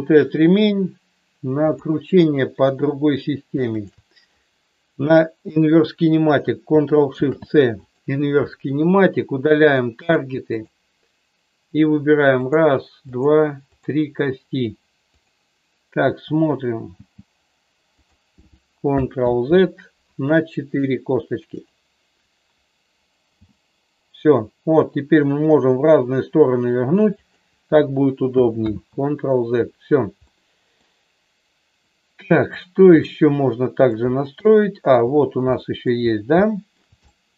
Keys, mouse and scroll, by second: 1.6-3.1 drag, 3.8-5.1 shift+drag, 7.1 ctrl+shift+c, 10.0 click, 12.3 click, 13.6 click, 15.1-16.4 drag, 16.8 g, 19.2 ctrl+z, 23.3 g, 27.1 click, 28.6 ctrl+z, 30.2 middle click, 31.7 middle click, 32.9 middle click, 34.5 shift+middle click, 35.6 middle click, 36.3 shift+middle click, 37.1 middle click.